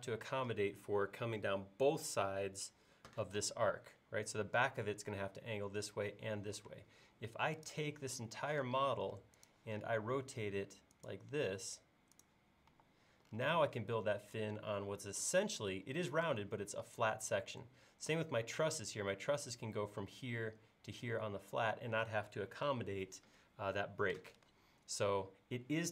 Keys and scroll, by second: 6.7 space, 8.6 q, 12.7 e.